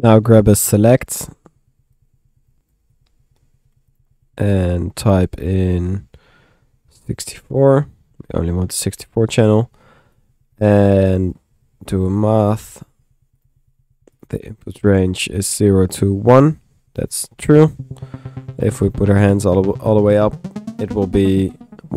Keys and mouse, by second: 0.0-0.4 typing, 0.5-1.6 drag, 1.9 click, 2.5-4.0 typing, 2.7 click, 4.0 click, 4.5 click, 5.4 click, 10.2-11.6 drag, 11.3 Tab, 13.1-13.9 typing, 13.5 click, 14.2 click, 15.0 click.